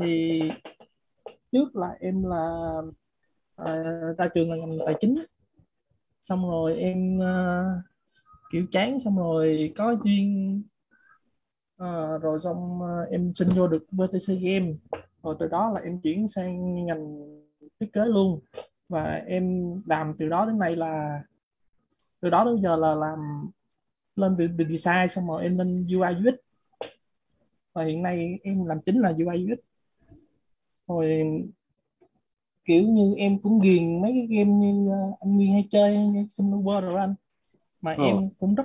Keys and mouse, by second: 0.0-0.9 typing, 0.6 Left, 8.7-13.6 typing, 14.9 Left, 16.2 BackSpace, 17.8 h, 18.5 Right, 19.8-25.2 typing, 28.7-36.0 typing.